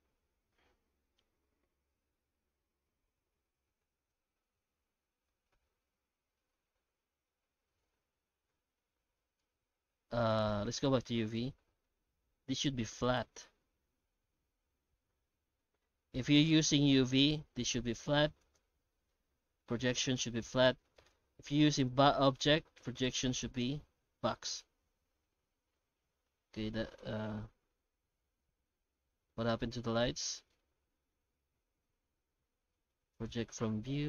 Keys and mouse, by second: 10.6 click, 11.7 middle click, 12.6-14.0 drag, 18.4-20.2 drag, 23.9-24.8 drag, 26.7 middle click, 29.6 middle click, 30.5 shift+middle click.